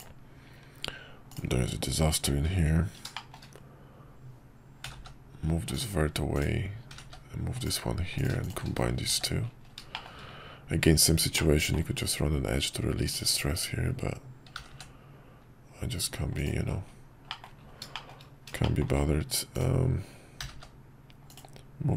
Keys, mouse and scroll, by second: 1.3 click, 3.1 shift+middle click, 6.3 click, 8.1 click, 9.2 shift+1, 9.9 shift+middle click, 10.1 shift+scroll down 1, 11.4 middle click, 14.6 g, 17.4 middle click, 18.1 shift+middle click, 18.7 shift+middle click, 19.5 click, 20.4 g.